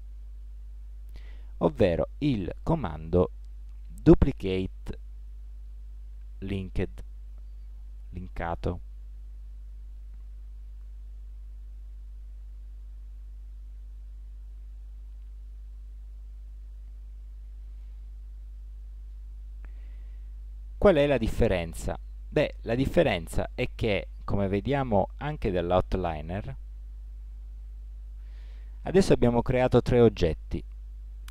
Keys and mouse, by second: 0.3-1.6 -, 2.7-4.3 -, 4.5 -, 4.6-6.5 -, 7.2-9.8 -, 11.3 ctrl+z, 12.7-17.4 -.